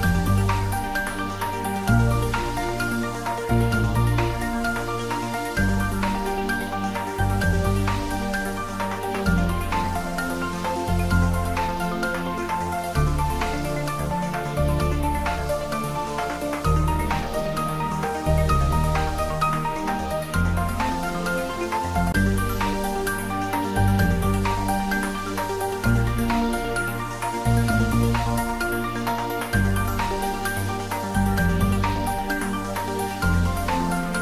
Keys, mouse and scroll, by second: 1.7-5.7 middle drag, 5.7 alt+shift+click, 8.9 ctrl+z, 10.1 ctrl+z, 11.2-12.6 middle drag, 12.6 scroll up 1, 13.4-15.9 middle drag, 15.9-17.9 middle drag, 17.9 shift+click, 25.7 shift+click, 30.7 shift+click, 34.0 shift+click.